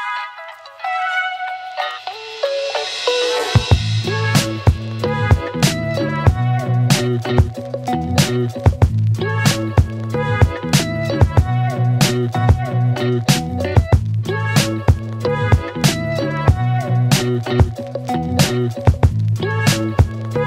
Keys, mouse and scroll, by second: 3.2 Return, 5.4 click, 7.1 click, 9.5-14.0 click, 18.4 right click, 19.9 click.